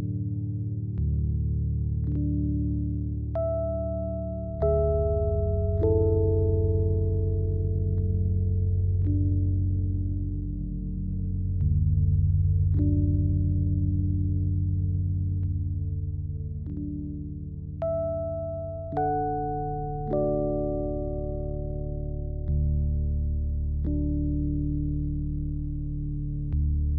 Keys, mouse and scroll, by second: 0.0-1.7 typing, 0.1 click, 0.2-0.7 scroll up 2, 0.6 click, 0.8 ctrl+a, 1.0 Tab, 1.9 click, 2.1 click, 2.9 click, 3.3-4.7 typing, 3.6 click, 3.9 click, 5.2 click, 6.0-9.3 typing, 6.2 click, 6.5 click, 6.5 right click, 7.3 click, 8.2 click, 8.8 click, 9.4 click, 9.7 scroll up 2, 9.9 alt+click, 10.3 click, 10.7 scroll up 1, 10.8 click, 11.2 ctrl+b, 12.0 alt+click, 13.2-13.7 alt+drag, 13.8 s, 14.1 click, 15.2 alt+click, 15.6 s, 16.0 click, 16.4 alt+click, 16.7-18.2 drag, 18.7-21.0 typing, 19.2 click, 19.5 scroll up 2, 19.8 shift+click, 20.8 shift+click, 21.1-21.4 scroll down 4, 21.3 Tab, 21.4 click, 21.6 ctrl+s, 21.7 click, 21.8 right click, 22.0-23.5 drag, 23.6-24.2 scroll down 3, 23.9-24.5 scroll up 2, 24.2-24.7 drag, 25.1 ctrl+s, 25.3 click.